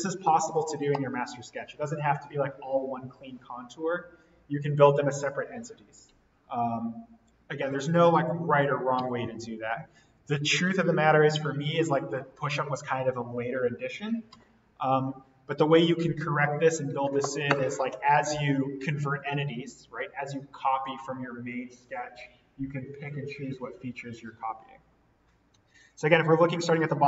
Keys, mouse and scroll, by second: 10.1-10.4 scroll up 1, 23.4-24.8 scroll up 1, 25.9-27.0 scroll down 1.